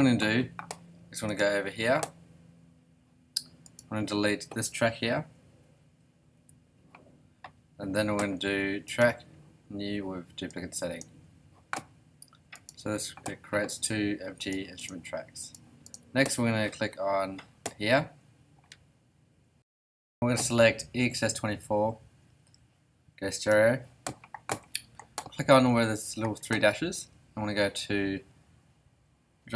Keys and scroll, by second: 6.3 BackSpace.